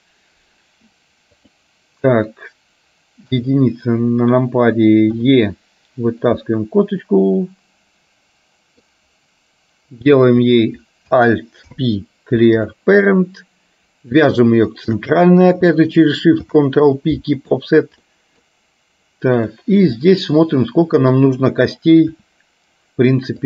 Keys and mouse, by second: 3.4 KP_1, 5.3 e, 6.5-9.0 middle drag, 10.5 click, 11.8 alt+p, 13.3-14.3 middle drag, 14.8 shift+click, 16.5 ctrl+p, 18.1 middle click, 19.5 click, 20.1-21.3 middle drag.